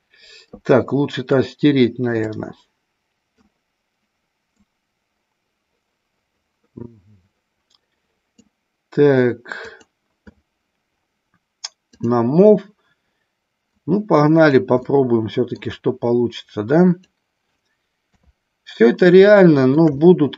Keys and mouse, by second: 1.4-2.0 drag, 2.2-3.4 drag, 4.7-8.4 drag, 9.5 click, 11.9 click, 13.7-14.7 drag, 14.8 middle click, 16.3 click, 18.0 KP_3, 19.2 shift+middle click, 19.9-20.3 middle drag.